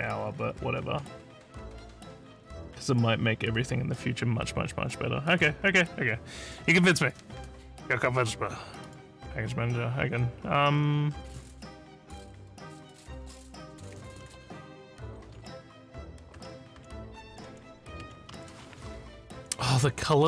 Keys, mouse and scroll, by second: 5.3 click, 7.0 click, 8.8 click, 10.8 scroll down 2, 11.1 scroll up 4, 13.1 click.